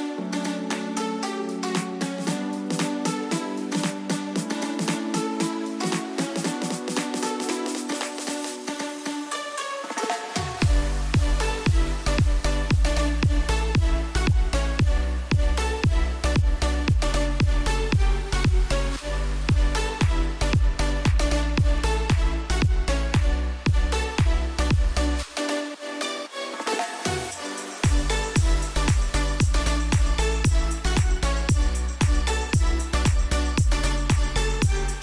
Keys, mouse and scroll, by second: 2.1 click, 2.7-4.1 alt+drag, 4.1-5.4 scroll down 1, 5.4 t, 5.5 click, 7.9 click, 13.5 v, 14.5-16.9 drag, 16.9 ctrl+t, 17.9-26.1 shift+drag, 26.1-30.3 shift+drag.